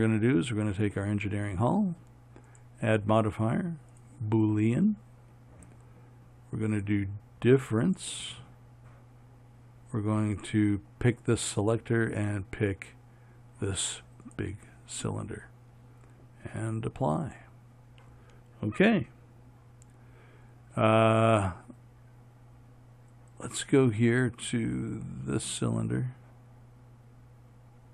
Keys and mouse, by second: 0.0-27.9 right drag.